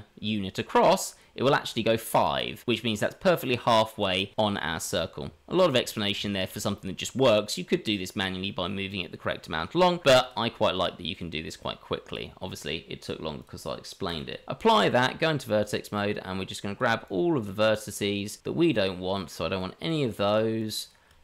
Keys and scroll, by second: 5.2 Tab, 6.1 Tab, 14.7 Tab.